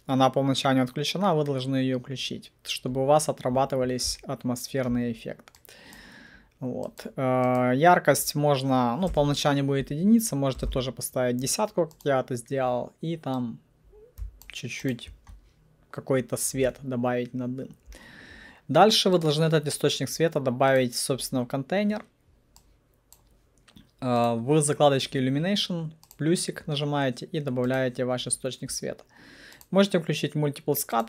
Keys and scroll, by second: 9.2 alt+1, 9.3 Return, 10.4-11.3 typing.